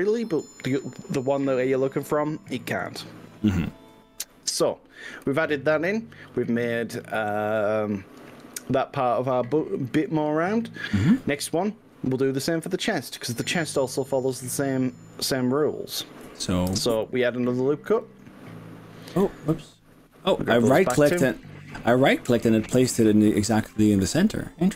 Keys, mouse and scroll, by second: 14.3 click, 16.7 ctrl+r, 19.3 right click.